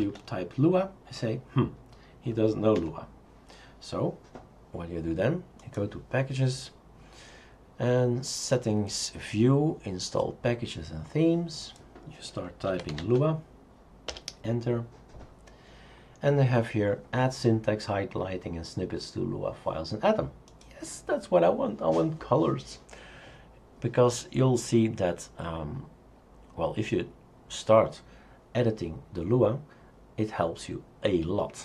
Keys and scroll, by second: 0.0-0.5 typing, 2.8 Escape, 12.5-13.5 typing, 14.1 Return.